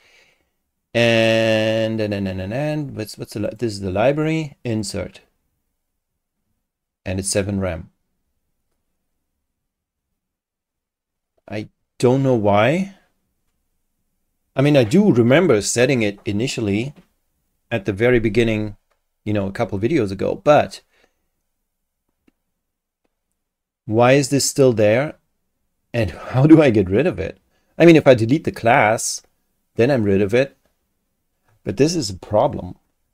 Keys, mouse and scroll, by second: 3.5 click, 4.8 click.